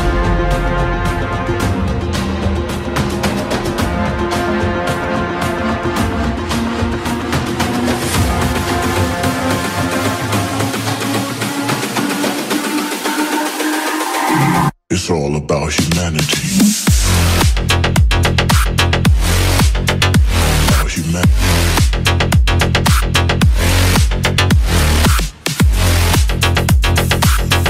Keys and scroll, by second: 17.2 space, 17.7 space, 18.9 space.